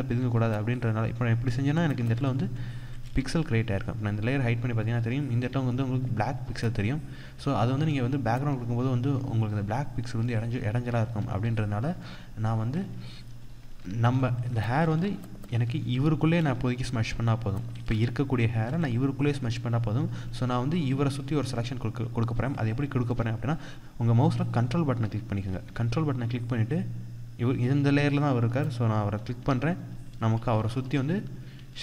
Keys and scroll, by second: 1.6 ctrl+=, 10.8 ctrl+z, 13.5 ctrl+0, 14.0 ctrl+=, 14.5 ctrl+space, 15.0 ctrl+=, 17.5 ctrl+space, 20.5 ctrl+0, 29.9 ctrl+=.